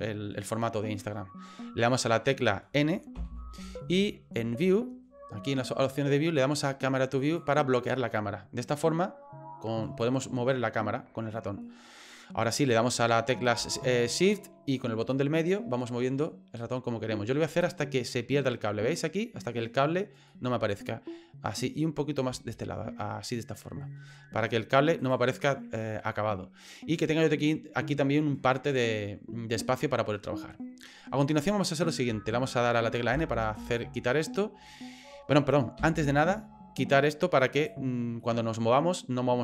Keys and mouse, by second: 3.1 n, 4.6 click, 7.2 click, 10.0-12.5 middle drag, 15.1-18.6 shift+middle drag, 20.3-22.2 middle drag, 22.5-24.0 shift+middle drag, 25.0 right click, 33.1 n, 35.8 n, 37.5 click, 38.2-39.4 middle drag.